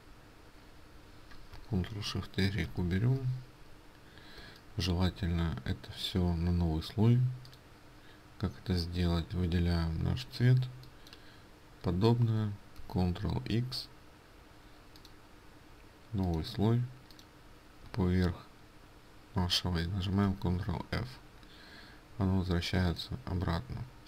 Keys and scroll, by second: 12.9 ctrl+x, 20.2 ctrl+f.